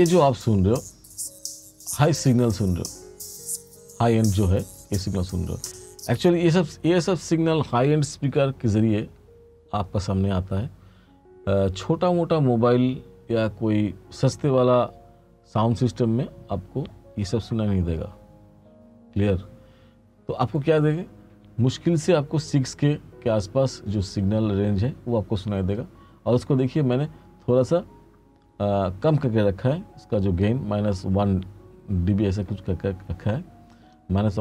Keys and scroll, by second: 5.8 space.